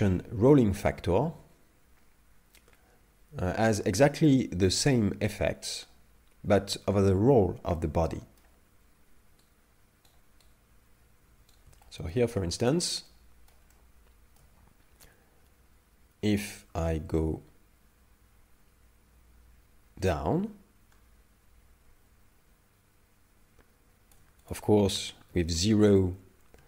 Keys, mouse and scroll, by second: 7.8 middle click, 9.6 right click, 10.6 right click, 10.8 right click, 11.9 shift+middle click, 12.6 shift+middle click, 13.1 middle click, 13.7 shift+middle click, 20.2 shift+click, 24.5 click.